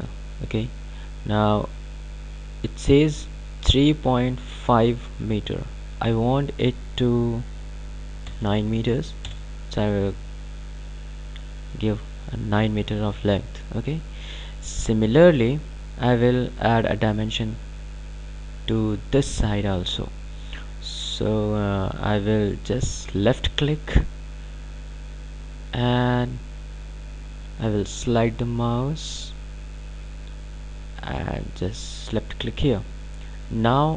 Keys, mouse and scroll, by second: 13.3-13.8 scroll down 2, 13.8-14.2 scroll up 2, 23.4 click, 32.1 click.